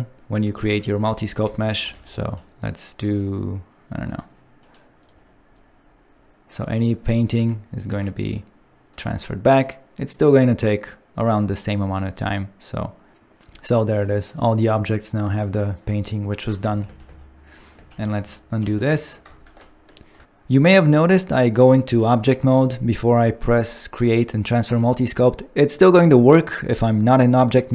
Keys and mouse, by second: 0.6 ctrl+Tab, 1.4 f, 1.6 click, 2.0 alt+3, 4.6 right click, 7.9 ctrl+Tab, 8.9-13.1 drag, 14.3 click, 15.0 click, 15.3 click, 16.6 ctrl+z, 16.9 ctrl+z, 17.1 ctrl+z, 17.8 ctrl+z, 18.2 ctrl+z, 18.4 ctrl+z, 18.7 ctrl+z, 19.4 ctrl+Tab.